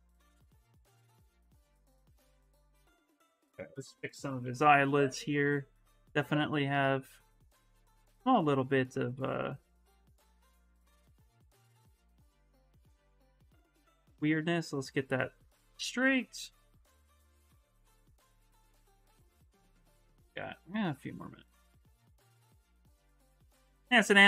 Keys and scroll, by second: 3.2 b, 3.9 v, 4.4 s, 6.7 s, 8.4 s, 9.1 s, 10.5-11.7 typing, 17.2 space.